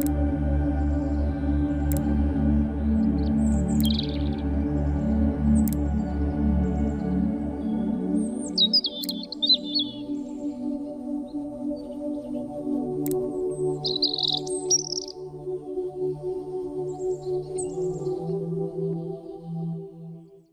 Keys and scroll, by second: 5.2 s.